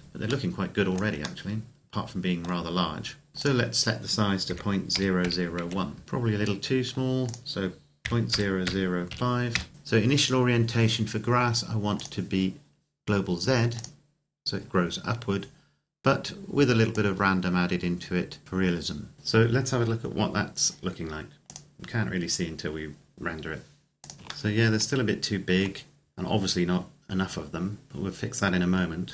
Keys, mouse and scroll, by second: 1.2 middle click, 3.3 click, 4.2 KP_Decimal, 4.7 KP_0, 5.3 KP_1, 6.0-6.3 scroll up 1, 7.0 click, 7.8 KP_Decimal, 8.1 KP_0, 8.8 KP_5, 9.3 KP_Enter, 9.7-10.1 scroll up 1, 11.7 click, 16.7 click, 21.7 click, 24.1 scroll up 1, 24.7 shift+middle click, 26.3-26.8 scroll up 1.